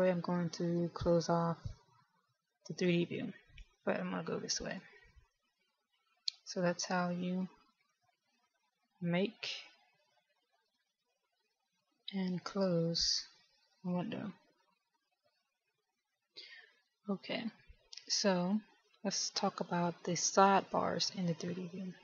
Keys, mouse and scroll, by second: 8.1 click, 11.6 click.